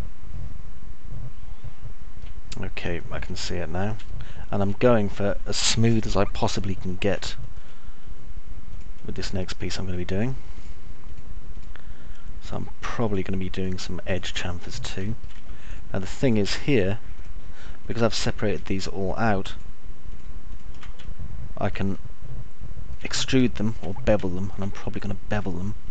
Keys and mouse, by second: 0.0-2.6 alt+middle drag, 3.5 middle click, 4.6 alt+middle click, 7.0-8.1 alt+middle drag, 9.6 ctrl+click, 12.8 ctrl+click, 15.1 middle click, 16.6 ctrl+click, 17.0 ctrl+click, 18.1 ctrl+click, 18.6 ctrl+click, 19.0 ctrl+click, 21.5 alt+middle click, 22.5-23.5 alt+middle drag, 23.6 middle click, 24.5 alt+middle click.